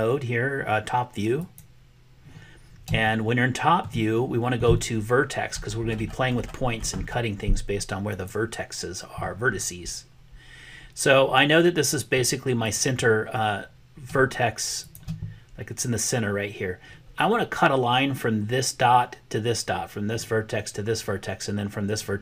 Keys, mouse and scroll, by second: 3.0 shift+click, 8.1 click, 14.7 shift+click.